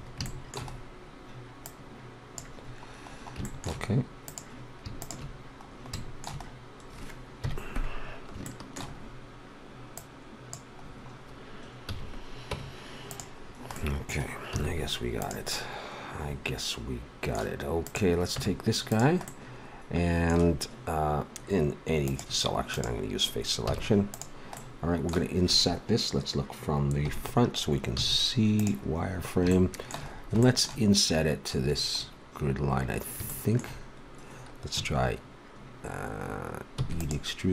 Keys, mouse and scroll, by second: 1.3 middle click, 1.6 middle click, 2.3-3.4 drag, 3.4 middle click, 7.3 KP_1, 9.9-11.8 drag, 11.8 a, 12.5 Tab, 14.5 z, 17.8-19.8 drag, 18.3 Tab, 22.0-25.7 drag, 23.6 a, 24.8-26.0 middle drag, 27.0 KP_1, 28.0 z, 29.0 middle click, 32.1-35.3 middle drag, 36.8 e.